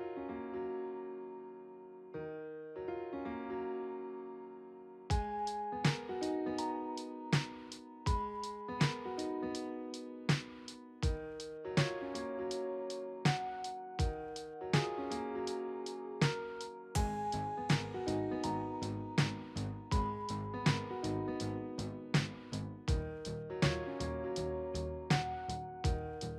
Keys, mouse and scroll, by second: 2.0 shift+click, 2.7 right click, 2.8 right click, 10.1 Delete, 21.3-22.2 typing, 23.4 BackSpace.